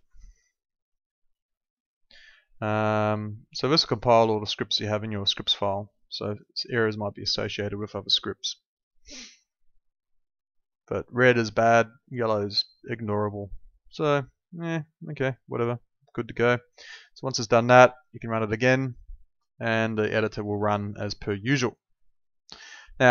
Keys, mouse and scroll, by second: 2.7 click, 16.1 click.